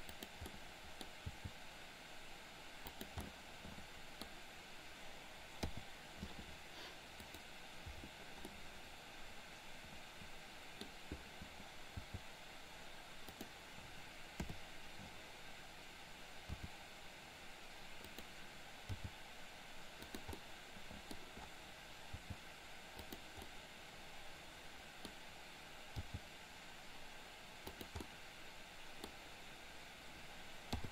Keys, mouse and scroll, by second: 0.4 middle click, 1.3 g, 3.2 scroll up 1, 3.4 middle click, 5.7 i, 7.3 click, 8.6-10.8 middle drag, 12.1 g, 14.4 KP_7, 16.6 r, 18.9 g, 20.4 middle click, 22.2 g, 23.4-25.2 middle drag, 26.1 g, 28.1-29.1 middle drag, 30.8 i.